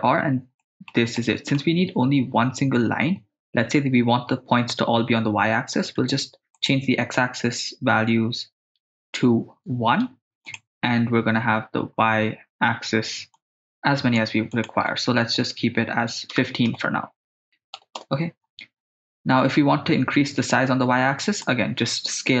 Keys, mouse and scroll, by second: 0.6 middle click, 1.2 ctrl+middle click, 6.6-7.7 drag, 8.9-10.5 drag, 13.4 click, 14.5-18.0 drag, 21.4 click.